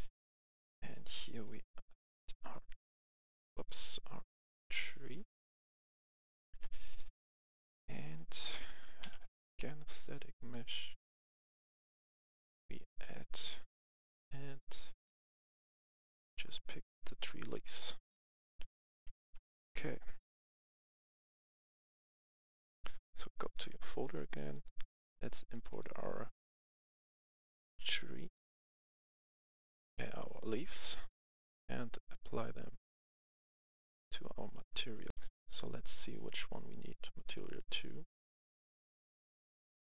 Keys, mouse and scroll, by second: 5.3 right click, 5.4 s, 5.9-6.7 s, 6.8 click, 8.5 click, 8.5 s, 8.9 t, 9.0 a, 10.3 click, 12.4 click, 16.9 right click, 17.2-20.1 typing, 17.8 right click, 20.2 click, 22.5 F11, 22.8 F10, 23.3 click, 24.5 click, 35.0 F11, 35.3 click, 35.7 click, 37.7-39.9 drag.